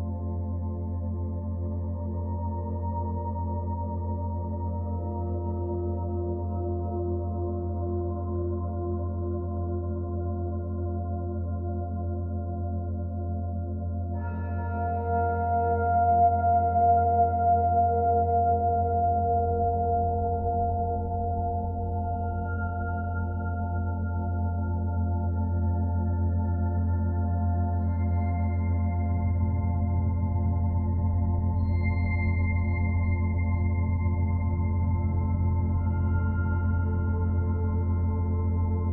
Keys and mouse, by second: 1.6-2.9 typing, 3.6 click, 4.8 click, 5.7-6.5 typing, 6.7 Return, 8.6 Tab, 10.4 /, 12.7-14.1 drag, 14.6-15.5 drag, 15.6-16.3 typing, 18.3 click, 20.1 alt+a, 20.4 b, 20.9 click, 21.9 b, 22.2-23.7 drag, 24.1-25.0 typing, 24.4-25.8 drag, 25.9 Delete, 26.4-28.9 drag, 30.1 /, 33.3 click, 35.0-35.8 drag, 38.5 Tab.